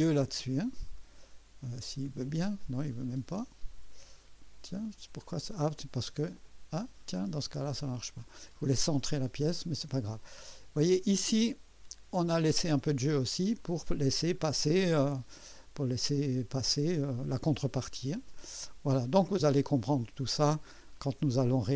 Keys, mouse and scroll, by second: 0.0 middle click, 2.0 middle click, 2.6-4.9 drag, 5.4 click, 6.8 scroll down 2, 7.4-9.4 drag, 9.5 right click, 10.2-11.7 drag, 14.1 scroll down 2, 15.0-15.4 scroll down 3, 17.8 scroll down 2, 18.3 click, 19.3 scroll down 2, 19.9 click.